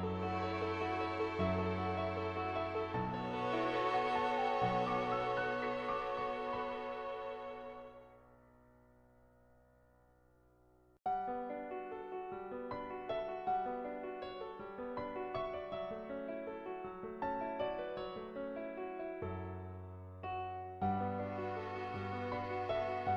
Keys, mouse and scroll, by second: 3.1 click, 7.1 click, 8.1 ctrl+z, 8.8 click, 12.1 click, 12.3 middle click, 13.8 middle click, 19.2-22.7 drag, 22.7 ctrl+z.